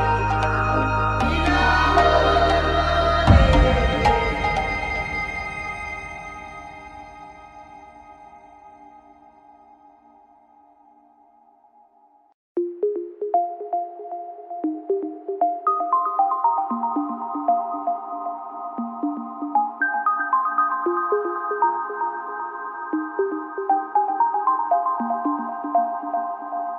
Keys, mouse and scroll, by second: 12.4 click, 13.1 middle click, 13.9 click, 16.0 middle click, 16.6 shift+d, 19.4 click, 20.8 shift+d, 25.8 middle click, 26.1 click, 26.3 click.